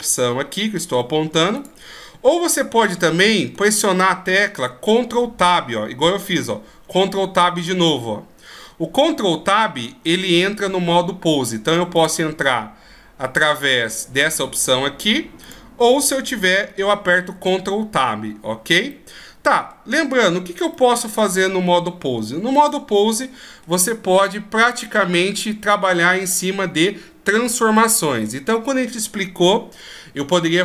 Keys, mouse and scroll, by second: 1.6 click, 3.5 ctrl+Tab, 7.2 ctrl+Tab, 9.4 ctrl+Tab, 12.0 click, 17.2 ctrl+Tab, 18.9 middle click, 20.7 middle click.